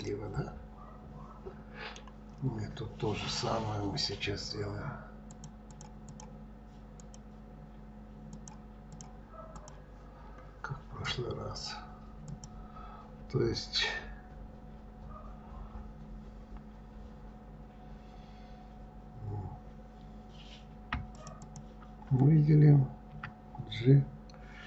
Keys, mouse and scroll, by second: 0.0-2.4 middle drag, 2.4-3.1 scroll up 2, 3.1-4.8 scroll down 1, 4.8-5.3 scroll down 1, 5.3 click, 5.7 click, 6.0 click, 7.0 click, 8.3 click, 8.9 click, 9.5 click, 10.2-12.3 scroll up 2, 12.3 click, 21.1 shift+click, 21.4 shift+click, 23.1 e.